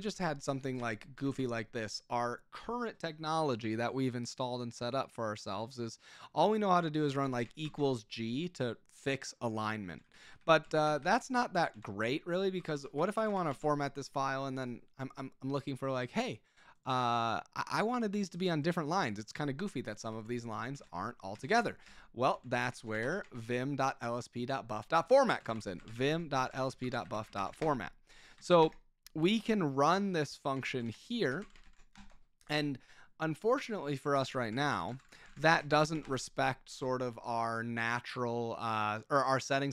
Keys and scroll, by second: 0.1 ., 0.7 Escape, 1.1 g, 1.3 g, 7.2 =, 7.6 shift+g, 9.8-14.0 typing, 11.7 Escape, 20.1 Escape, 20.5-23.9 typing, 25.1-28.8 typing, 30.7-32.2 typing, 34.1-35.9 typing, 36.0 Return.